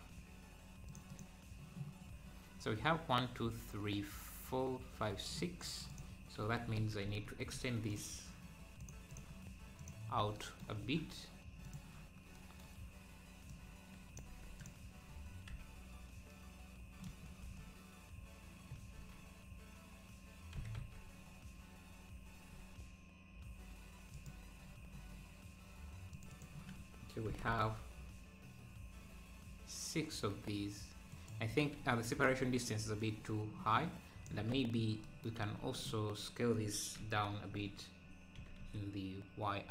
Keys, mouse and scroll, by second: 0.8-5.6 drag, 5.9 click, 6.3 scroll down 3, 6.9 Tab, 7.9-8.9 drag, 10.8 scroll up 2, 11.6 click, 13.5 click, 14.3 Tab, 14.9 click, 15.5 h, 17.4 h, 18.9 alt+h, 26.1-27.3 drag, 27.3 g, 33.0-34.5 shift+drag, 34.5 Tab, 35.4 a, 37.5-38.3 scroll up 1, 38.3 s.